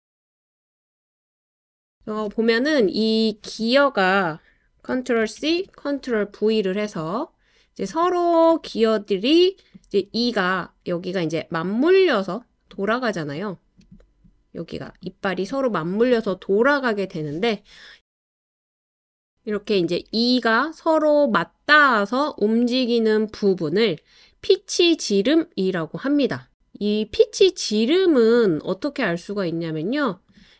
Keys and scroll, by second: 5.2 super+c, 5.5 super+v, 17.8 Up, 19.6 Down, 19.7 Down, 19.9 Down, 20.1 Down, 20.3 Down, 21.9 Left, 22.2 Left.